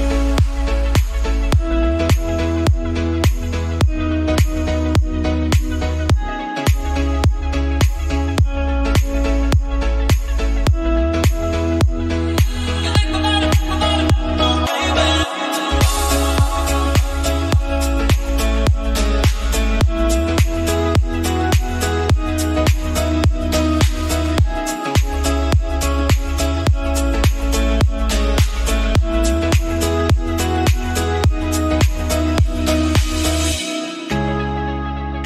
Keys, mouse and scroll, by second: 1.0 /, 1.3 scroll down 2, 1.5 middle click, 1.7 click, 1.9 middle click, 2.3 scroll up 3, 2.5 middle click, 3.3 /, 3.5 click, 3.6 /, 3.8 middle click, 4.6-8.5 drag, 10.1-11.1 middle drag, 11.1-12.5 drag, 13.5 scroll down 1, 13.5-14.5 middle drag, 14.5-15.1 scroll down 4, 15.1-16.1 drag, 16.1 KP_1, 16.9 shift+middle click, 17.5 /, 17.8 scroll down 1, 18.0 middle click, 18.8 shift+a, 20.1 click, 20.6-21.6 middle drag, 21.8-23.1 drag, 24.2-26.1 drag, 26.1-27.5 middle drag, 27.6-28.9 middle drag, 28.9-30.3 drag, 30.3 Delete, 31.0 shift+a, 32.8 click, 33.3 middle click, 33.7 Tab, 34.1 right click, 35.0-35.2 drag.